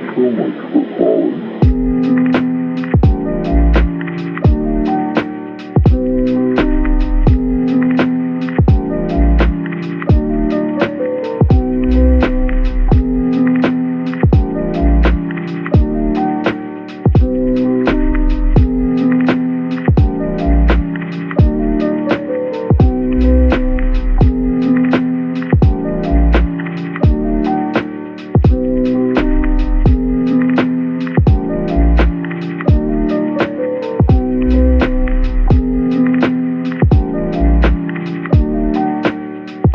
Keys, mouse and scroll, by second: 0.7 scroll down 1, 5.5 scroll down 1, 9.5 ctrl+s.